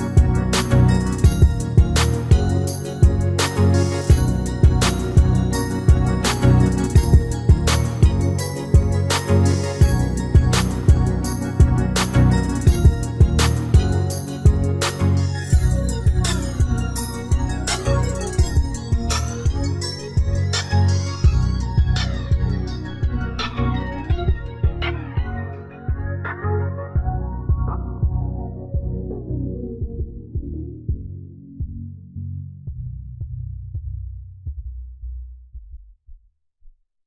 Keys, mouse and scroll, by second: 0.3-2.0 middle drag, 2.1-3.8 middle drag, 4.0 middle click, 4.7 shift+d, 8.8-13.2 middle drag, 13.5-15.1 middle drag, 15.2 middle click, 18.5-20.3 drag, 19.1-21.9 middle drag, 21.4-23.2 drag, 22.8 shift+a, 24.6-26.3 middle drag, 25.8 KP_1, 27.0 s, 29.2-31.0 middle drag, 30.5-32.3 drag, 32.6 KP_3, 34.4-36.1 drag.